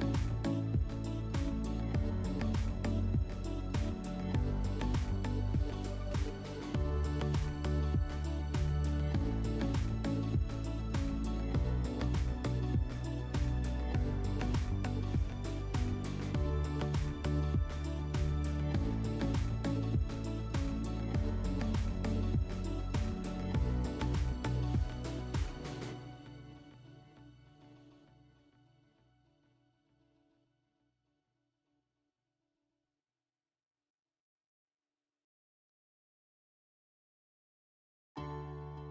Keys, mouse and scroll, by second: 6.7 click, 6.9 click, 7.9 2, 10.4-11.8 drag, 11.9 /, 14.0 /, 15.1 click, 23.0 click, 37.7-38.9 drag.